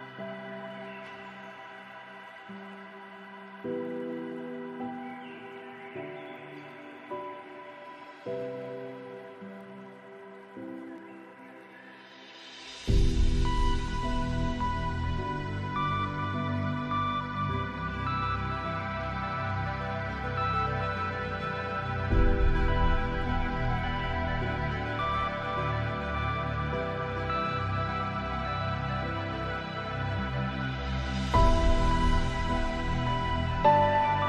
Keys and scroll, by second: 1.3 ctrl+b, 20.2 ctrl+space.